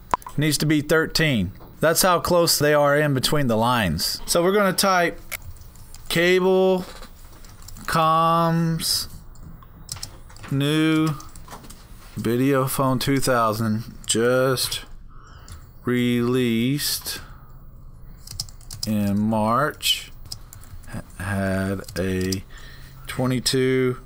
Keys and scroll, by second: 5.1-6.3 typing, 7.5-12.7 typing, 13.7-17.2 typing, 18.4-23.2 typing.